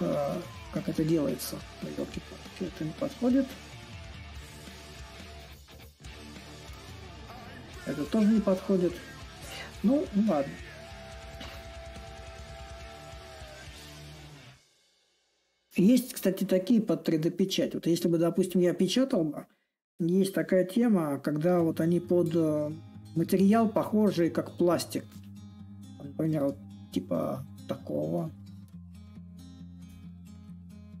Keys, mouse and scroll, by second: 0.0-5.0 drag, 6.4-11.4 drag, 13.0-18.0 drag, 18.8-20.1 middle drag, 20.1-21.5 scroll down 2, 21.5-23.1 scroll down 1, 23.1-24.9 scroll down 1, 24.9 scroll down 1, 26.0-31.0 drag.